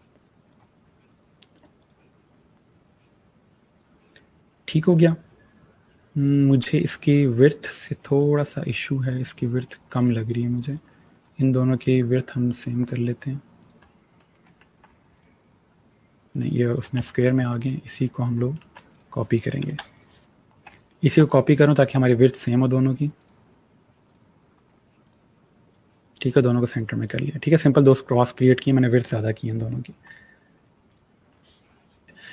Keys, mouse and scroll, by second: 3.6 click, 8.1 alt+click, 11.1 click, 13.5 click, 14.3 ctrl+a, 14.6 ctrl+c, 15.1 click, 16.9 ctrl+z, 18.1 ctrl+z, 18.8 click, 21.2 right click, 23.1 click, 30.8 click, 32.2 click.